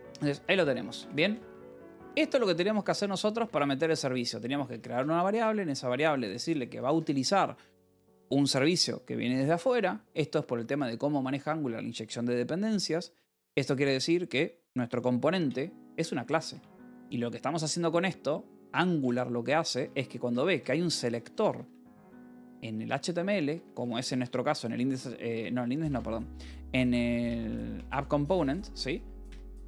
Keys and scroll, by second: 0.0-5.4 typing, 1.4 Escape, 3.3 Escape, 6.7 v, 7.5 e, 8.4 Escape, 15.7-17.2 typing, 18.9 Escape, 19.3 k, 20.4 v, 21.1 e, 22.6 Escape, 23.4-29.6 typing, 29.2 Return.